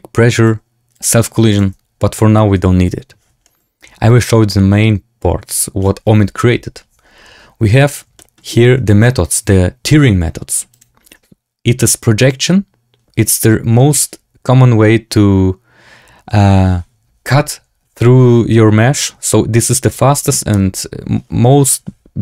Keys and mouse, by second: 0.9 click, 1.5-2.9 drag, 3.4 shift+drag, 8.1 shift+click, 10.6-22.2 drag.